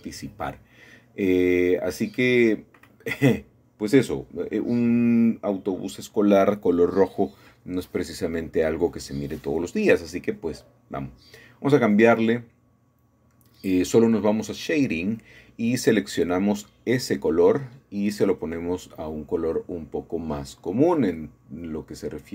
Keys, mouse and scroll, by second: 0.2-1.0 scroll down 1, 2.9 middle click, 3.3-3.8 middle drag, 6.0 middle click, 8.7-9.7 scroll up 2, 9.7-10.8 shift+middle drag, 11.5 middle click, 11.8-13.2 scroll up 2, 16.5-17.6 drag, 20.5-21.6 drag.